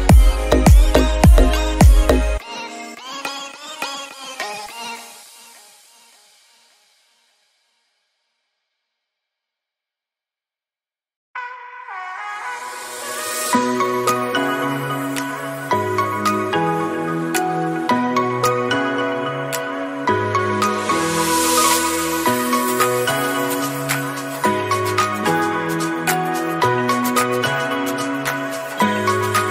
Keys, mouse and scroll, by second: 0.1-0.8 middle drag, 0.8 KP_7, 1.3 g, 10.4 click, 10.8-11.8 drag, 13.6 click, 14.5-15.6 drag, 15.9-16.6 middle drag, 16.6 scroll down 2, 16.9-18.0 shift+middle drag, 18.0 shift+click, 18.5 KP_7, 19.0 click, 23.6-24.9 drag, 24.9-25.5 middle drag, 25.5-25.8 scroll up 3, 25.8-26.3 shift+middle drag, 26.3-27.0 scroll down 1, 27.0-27.7 drag, 27.7 a, 27.9 a, 28.3 s.